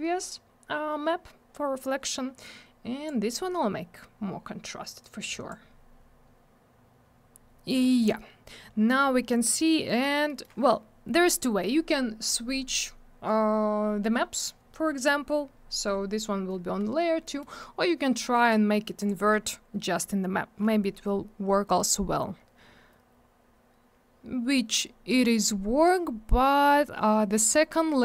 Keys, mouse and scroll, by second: 2.4 click, 5.0 click, 7.6 scroll up 1, 9.4 scroll down 1, 10.2 middle click, 10.4 middle click, 17.2 middle click, 17.3 middle click, 19.0 click, 21.4 scroll up 1, 22.6-23.1 scroll down 1, 24.8 scroll up 1, 26.6-26.9 scroll down 1.